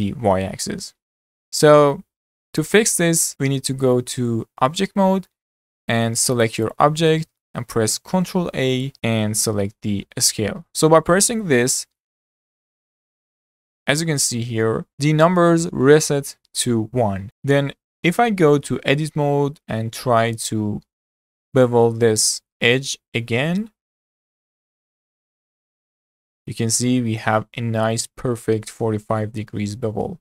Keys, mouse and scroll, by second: 0.9-1.5 scroll down 4, 1.5-2.6 middle drag, 2.6 click, 3.1 scroll down 2, 3.3-6.4 shift+middle drag, 6.4 click, 6.7 click, 7.1-8.3 middle drag, 8.3 ctrl+a, 18.9 Tab, 19.6-20.9 middle drag, 20.9-21.3 scroll up 1, 21.3-24.3 shift+middle drag, 24.3 ctrl+b, 26.2-27.5 middle drag, 27.5-28.0 scroll up 4, 28.0-30.2 shift+middle drag.